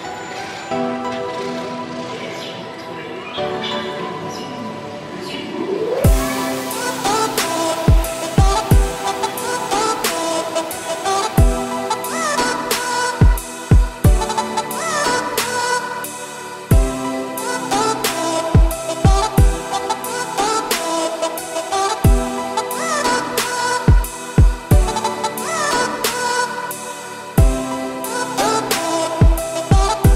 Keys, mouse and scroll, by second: 2.3 click, 3.0 scroll down 6, 3.6 ctrl+s, 4.1 click, 4.9 click, 5.5 click, 5.8 shift+middle drag, 6.0-8.2 scroll up 10, 8.2 ctrl+2, 8.6-9.0 shift+middle drag, 9.0 click, 10.1-11.5 scroll down 15, 12.1-16.7 shift+middle drag, 19.1-19.9 scroll down 3, 20.8-21.6 middle drag, 21.6-22.0 scroll up 2, 22.0 middle drag, 22.3-22.8 scroll up 2, 22.8-23.4 shift+middle drag, 23.4-25.0 scroll up 3, 25.0-26.6 scroll up 1, 27.5-30.0 scroll down 2, 30.0-30.1 scroll down 1.